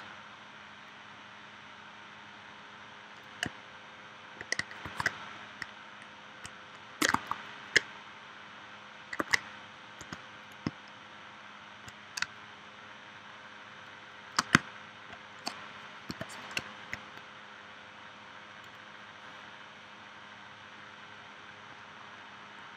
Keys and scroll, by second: 4.8 super+s, 9.2 super+Tab, 10.0 v, 12.2 space, 16.1 p.